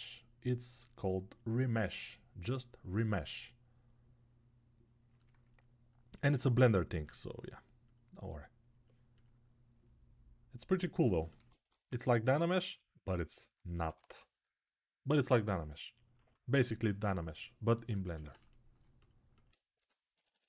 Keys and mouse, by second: 6.7 q, 11.4 ctrl+Tab, 13.6 6, 13.9-14.8 ], 19.5-20.3 typing.